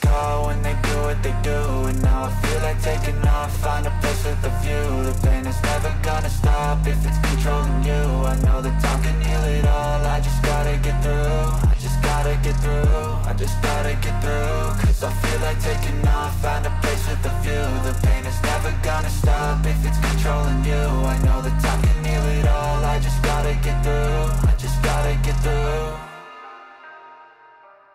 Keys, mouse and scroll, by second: 0.1 click, 24.5 click, 26.6 click.